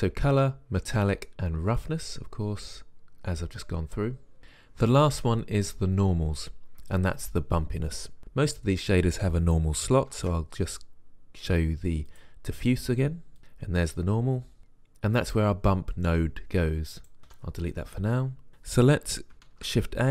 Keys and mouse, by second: 2.0 click, 10.4 shift+a, 17.5 Delete, 19.7 shift+a.